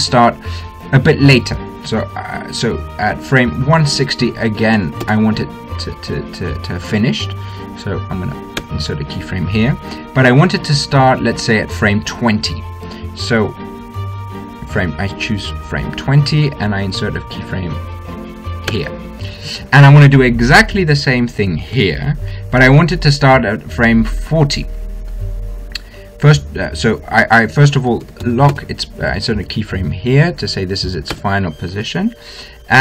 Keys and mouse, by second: 4.4-6.3 drag, 9.4 i, 12.0-14.0 drag, 14.0 middle click, 14.8-16.8 drag, 16.8-19.5 middle drag, 19.5 i, 22.6-24.6 drag, 24.6 middle click, 25.4-27.4 drag, 27.8-29.6 drag, 32.0 i.